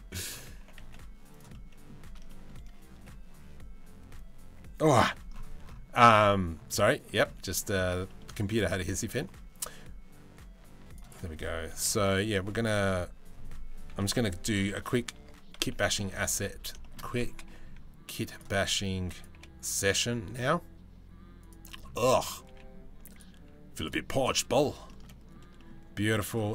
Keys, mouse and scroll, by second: 0.2 g, 1.1 middle click, 1.9 shift+middle click, 6.7 middle click, 7.7 middle click, 8.0-9.1 shift+middle drag, 11.5 x, 13.5 r, 15.3 KP_3, 15.7 KP_1, 16.4 shift+middle click, 17.1-23.0 drag, 17.1 g, 18.3 s, 19.0 g, 23.0 s, 23.8-24.1 middle drag, 24.7 middle drag, 25.2 middle click, 25.9 click.